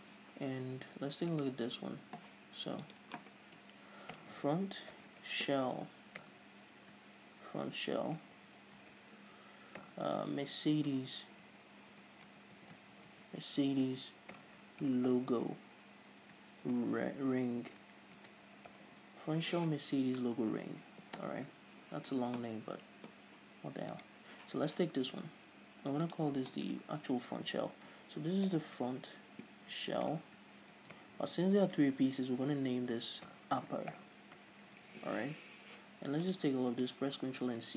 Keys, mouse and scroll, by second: 24.6 right click.